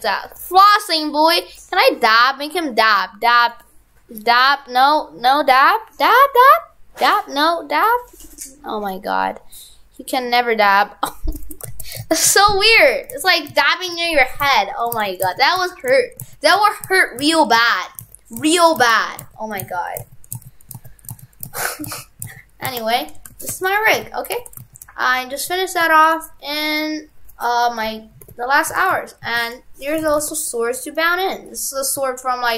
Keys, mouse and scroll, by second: 1.4 right click, 2.6 click, 4.4 right click, 5.5 click, 7.1 right click, 7.2 right click, 7.9 click, 11.8 ctrl+z, 12.1 ctrl+z, 12.4 ctrl+z, 12.9 ctrl+z, 13.2 ctrl+z, 13.6 ctrl+z, 15.0 ctrl+z, 15.3 ctrl+z, 16.2 ctrl+z, 16.6 ctrl+z, 16.6 ctrl+z, 16.9 ctrl+z, 17.3 ctrl+z, 17.6 ctrl+z, 18.1 ctrl+z, 18.8 ctrl+z, 18.9 ctrl+z, 19.3 ctrl+z, 19.8 ctrl+z, 20.1 ctrl+z, 20.4 ctrl+z, 21.2 ctrl+z, 21.6 ctrl+z, 21.9 ctrl+z, 22.3 ctrl+z, 22.7 ctrl+z, 23.3 shift+f, 24.0 ctrl+Tab, 24.4 shift+f, 28.3 alt+h, 28.8 shift+f, 29.9 right click, 30.0 right click, 30.1 shift+f, 31.5 right click.